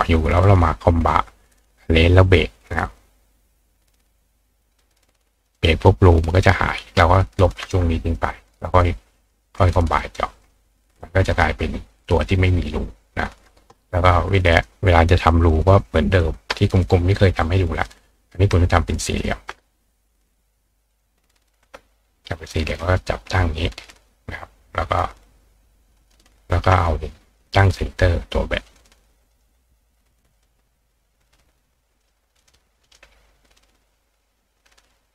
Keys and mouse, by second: 3.0-4.8 drag, 4.9 click, 5.5-5.9 drag, 6.4-8.1 drag, 8.2-8.8 drag, 8.9-10.4 drag, 8.9-9.3 right drag, 10.5-10.9 drag, 11.0 click, 11.4 click, 12.3-14.5 drag, 14.6-17.7 right drag, 15.5 click, 17.7 click, 20.3 click, 20.9 click, 21.6 ctrl+click, 22.7 click, 26.1 shift+click, 26.6 shift+click, 27.5-28.7 drag, 28.8 click, 29.4 click, 30.4-32.1 right drag, 32.0 click, 32.5 click, 32.9-33.5 drag, 33.6-34.6 drag, 34.7 click.